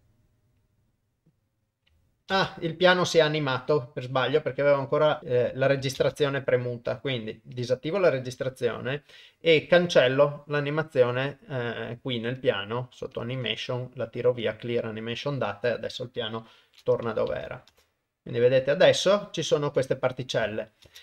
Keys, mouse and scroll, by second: 7.6 click, 12.4 click, 13.6 right click, 16.6 shift+Left, 17.7 shift+space, 20.9 shift+space.